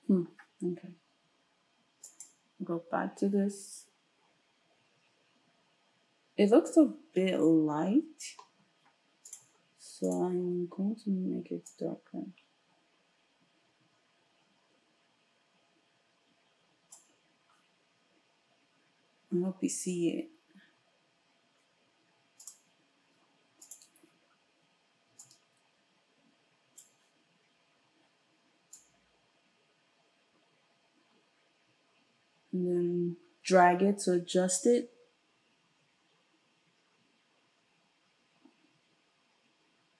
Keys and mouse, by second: 2.2-9.2 ctrl+shift+middle drag, 9.2-10.2 drag, 10.2-22.4 middle drag, 22.4 click, 22.5-28.8 middle drag, 28.8-39.9 drag.